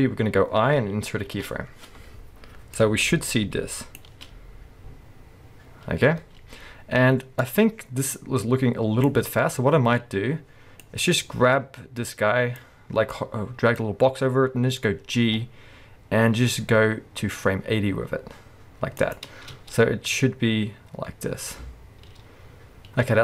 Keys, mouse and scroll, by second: 4.0 space, 6.2 space, 13.1-15.2 drag, 15.2 g, 19.1 click, 19.5 space, 23.0 space.